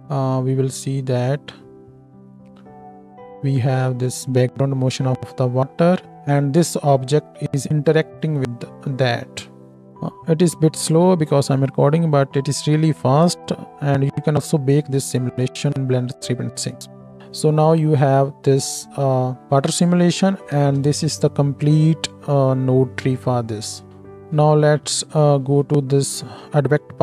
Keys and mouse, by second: 9.7 space, 17.2 space, 20.6 ctrl+space, 24.1 ctrl+space, 24.5-27.0 middle drag.